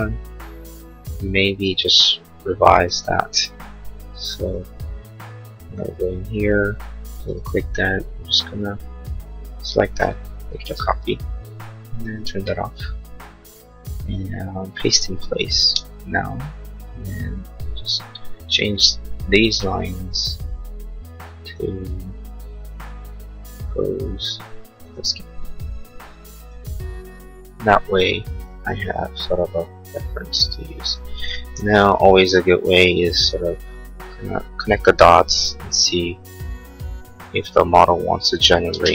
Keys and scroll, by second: 10.6 ctrl+c, 31.6 l, 35.0 Escape, 38.8 space.